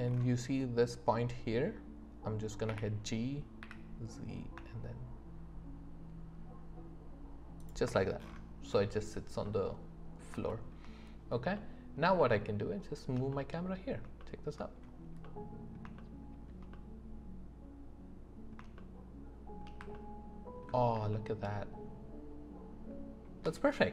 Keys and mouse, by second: 2.7 g, 3.6 z, 9.4-23.9 drag.